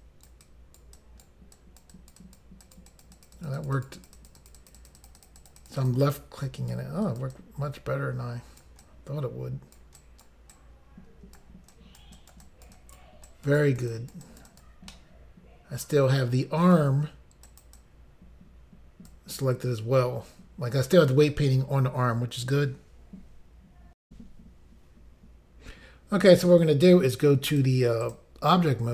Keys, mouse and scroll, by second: 0.0 click, 0.5 click, 1.0 click, 1.6 click, 1.9 click, 2.2 click, 2.7 click, 3.3 click, 3.5 double click, 3.6 double click, 3.7 double click, 3.8 double click, 3.9 double click, 4.0 double click, 4.1 double click, 4.2 double click, 4.3 double click, 4.4 double click, 4.5 double click, 4.6 double click, 4.8 double click, 4.9 double click, 5.0 double click, 5.1 double click, 5.2 double click, 5.3 double click, 5.4 double click, 5.5 double click, 5.6 double click, 5.7 double click, 5.8 double click, 5.9 double click, 6.1 double click, 7.1 click, 7.2 click, 7.4 click, 8.8 click, 10.0 click, 10.6 click, 11.7 click, 12.2 click, 12.4 click, 12.5 click, 12.8 click, 13.3 click, 13.6 click, 13.9 click, 14.5 click, 14.7 double click, 14.9 middle click, 17.5 click, 17.7 click, 17.8 click, 24.0 Pause, 27.4 click, 27.6 click, 28.0 click, 28.1 click.